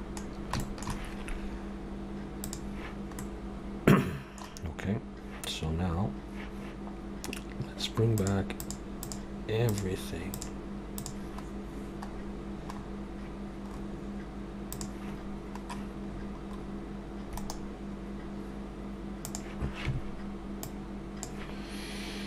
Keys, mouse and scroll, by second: 0.2 scroll down 1, 0.6 shift+middle click, 2.4 click, 3.2 middle click, 8.3 click, 8.6-11.5 click, 11.5 scroll down 1, 13.6 scroll down 5, 14.8 click, 15.2 scroll down 1, 17.3 right click, 17.3-17.9 scroll down 4, 20.6 click.